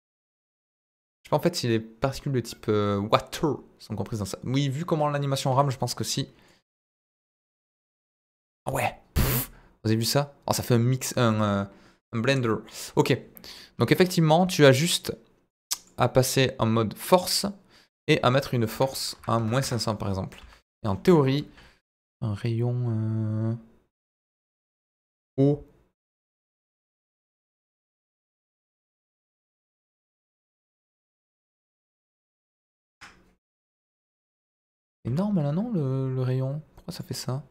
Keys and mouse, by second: 0.4-5.6 drag, 6.4-11.3 drag, 12.4 click, 14.8 click, 15.4 click, 15.9-17.1 drag, 18.0-19.9 drag, 19.3 KP_0, 20.3 s, 21.0 Escape, 31.1 click, 31.9-32.9 drag, 34.0 ctrl+z, 35.0 ctrl+z.